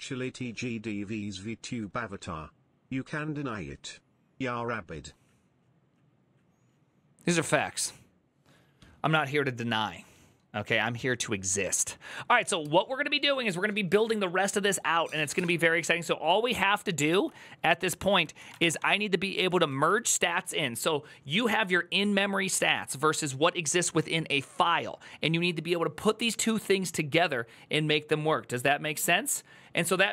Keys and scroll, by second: 17.4 alt+{, 18.2-20.1 typing.